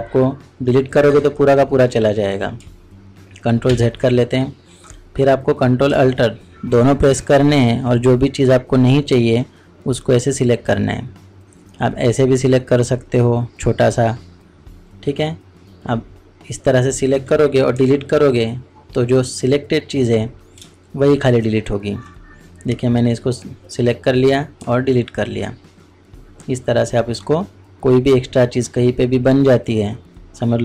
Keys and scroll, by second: 3.7 ctrl+z, 5.8 ctrl+z, 17.7 ctrl+alt+Delete.